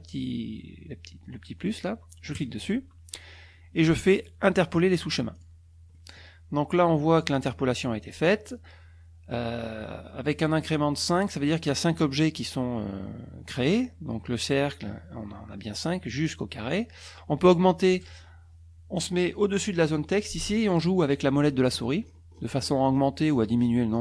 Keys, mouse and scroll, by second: 2.4 click, 5.3 click, 6.0 middle click, 11.0 click, 20.6-22.0 scroll up 8, 22.4 scroll up 2, 23.0 scroll up 2, 23.3 scroll down 2, 23.9 scroll up 1.